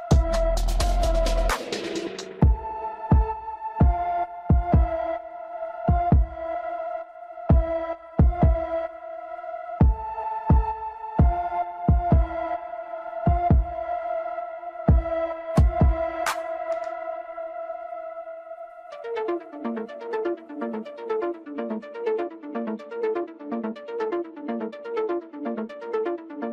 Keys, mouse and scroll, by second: 0.2 click, 4.4-7.5 middle drag, 7.8 scroll down 1, 8.9 KP_1, 11.2 shift+z, 12.8 click, 15.5-15.9 scroll down 1, 15.9-18.9 middle drag.